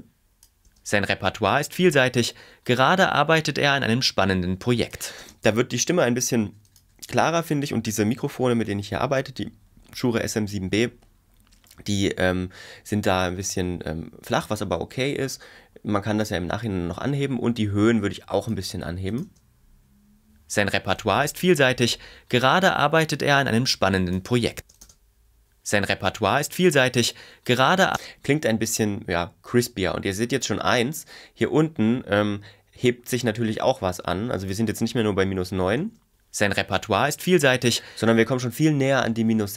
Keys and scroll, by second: 0.7 space, 5.2 space, 19.2 space, 24.6 space, 27.9 space, 35.8 space, 38.0 space.